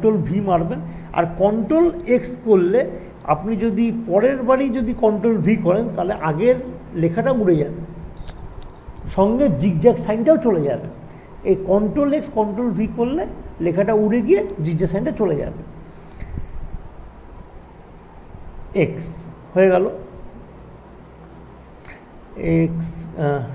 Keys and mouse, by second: 2.5 ctrl+x, 3.9 Down, 7.6 ctrl+v, 18.0 ctrl+z, 20.2 click.